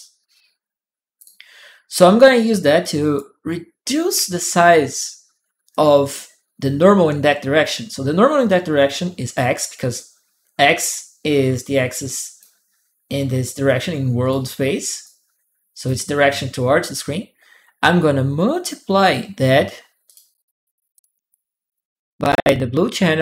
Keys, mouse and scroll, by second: 1.0 ctrl+click, 2.6 ctrl+right click, 2.6 click, 5.5-8.5 drag, 9.7 click, 11.7 click, 13.4 click, 14.8 click, 18.7 m, 18.8 click, 18.9 m, 19.0 m, 19.8 click, 20.7 click, 22.8-23.2 drag.